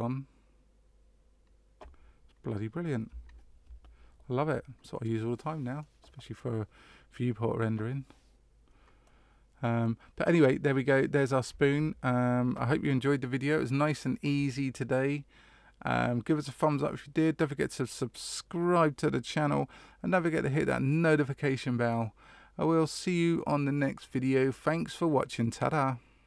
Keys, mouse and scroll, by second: 9.0 middle click, 10.6 middle click.